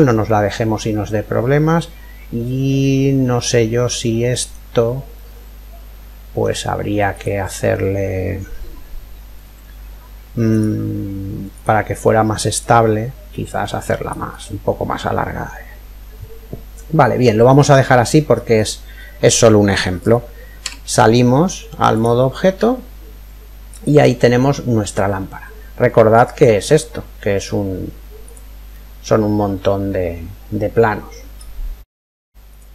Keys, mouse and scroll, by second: 4.8-6.7 middle drag, 6.7-8.7 right drag, 10.1-14.1 drag, 14.0-15.7 middle drag, 15.7 middle click, 18.1-19.8 scroll up 1, 19.8 scroll up 1, 20.1-20.5 scroll down 1, 20.3 Tab, 22.0-23.9 middle drag, 25.8 click, 27.8 click, 28.3-30.2 middle drag, 32.1 click, 32.5-32.7 middle drag.